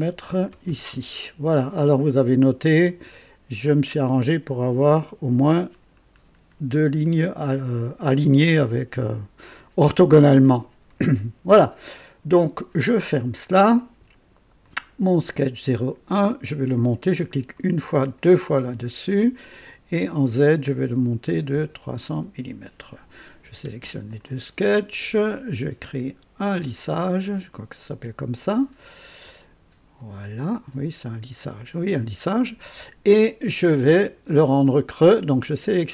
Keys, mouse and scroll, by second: 0.2 KP_3, 0.5 KP_0, 0.9 Return, 12.7 click, 14.6 click, 17.5 click, 18.2 click, 19.5 click, 21.1 KP_3, 21.3 KP_0, 22.1 KP_Enter, 23.8 typing, 24.1 ctrl+click, 25.9 click, 30.0 click, 33.9-35.2 drag, 35.7 click.